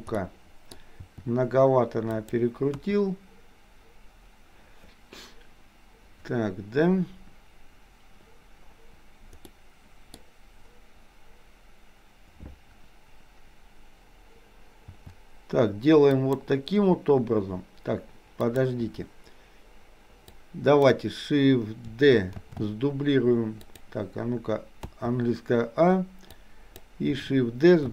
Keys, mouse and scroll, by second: 0.3 middle click, 1.1 r, 2.8 KP_1, 9.5 middle click, 15.0 r, 18.6 click, 20.3 click, 22.5 shift+d, 24.9 a, 26.4 click.